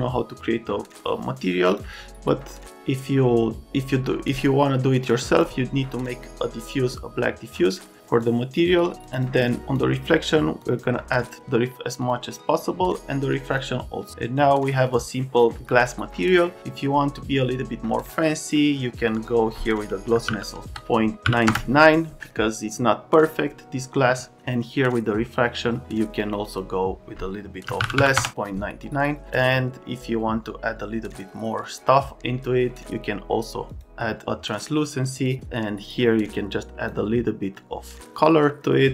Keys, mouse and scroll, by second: 1.6 click, 5.0 click, 7.5 click, 8.2-8.6 drag, 8.7 click, 9.1 click, 9.6 click, 10.6 click, 12.0 click, 13.3 click, 14.7 click, 14.9 click, 18.0 click, 18.2 click, 19.0 click, 19.1 click, 20.1 KP_Decimal, 20.2 KP_9, 21.2 KP_9, 21.5 KP_Enter, 27.7 KP_Decimal, 27.8 KP_9, 28.0 KP_9, 28.1 KP_Enter, 38.5 click.